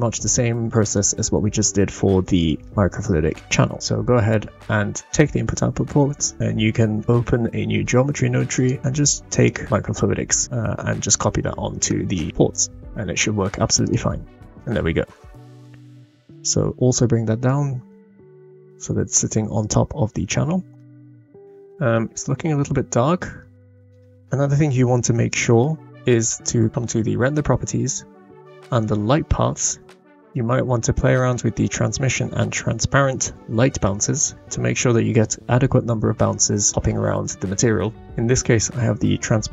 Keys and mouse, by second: 2.6-3.1 middle drag, 8.6 click, 11.8-12.8 middle drag, 14.1 drag, 14.6-15.6 middle drag, 18.4 g, 21.9-23.0 middle drag, 23.7 click, 23.7 middle click, 23.7 right click, 36.3 click, 36.4-37.9 middle drag, 37.5-37.8 drag, 37.5-37.8 right drag.